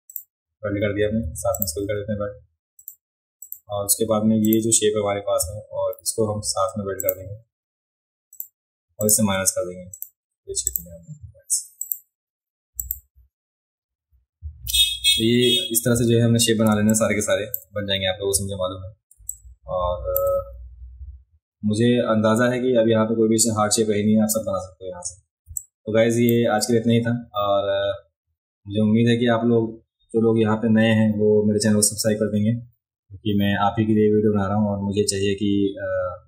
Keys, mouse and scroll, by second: 0.1 click, 1.6 shift+click, 2.8 click, 3.4 click, 4.4 click, 7.0 shift+click, 8.3 click, 9.0 shift+click, 9.9 click, 10.7 click, 11.0-11.4 alt+scroll down 1, 11.8 click, 12.8 click, 13.4-13.8 alt+scroll up 2, 14.6-15.4 scroll up 4, 16.0-16.4 alt+scroll up 2, 16.7 space, 16.9 click, 19.1 space, 19.3 click, 25.5 space, 25.6 click.